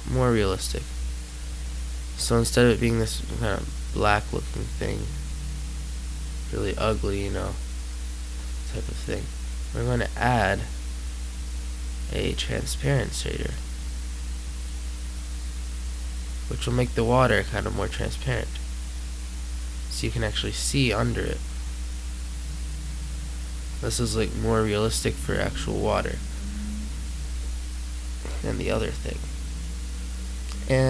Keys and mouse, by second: 2.0-4.2 middle drag, 13.9 click, 14.9-16.1 drag.